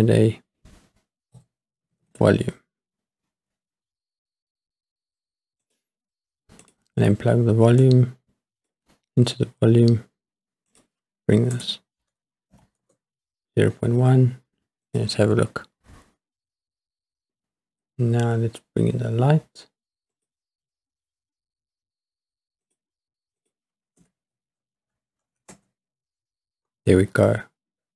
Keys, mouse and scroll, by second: 7.8-8.7 drag, 9.8-10.7 scroll up 2, 10.7-12.8 drag, 15.2 click, 20.1 click, 22.7 click, 23.4-25.6 drag, 24.8 KP_0, 25.1 KP_0, 25.3 KP_0.